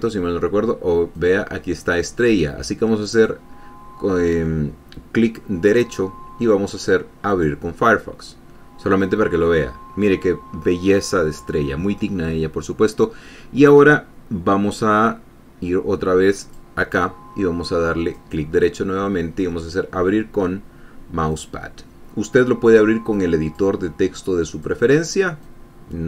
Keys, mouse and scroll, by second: 1.5 click, 1.8-3.5 middle drag, 3.5 right click, 7.6 click, 8.0-12.7 middle drag, 16.8 click, 18.5 right click, 21.7 click, 23.5 click, 24.9 click, 25.8-26.0 drag.